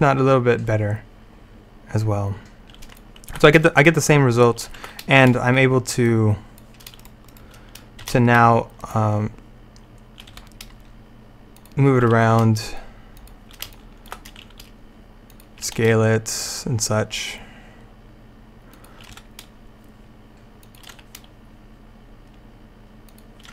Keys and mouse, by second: 3.3 alt+a, 4.8 alt+a, 6.1 click, 7.4 right click, 8.1 shift+d, 8.4 right click, 10.4 r, 12.2 g, 13.8 click, 14.5 s, 19.2 r, 21.0 g.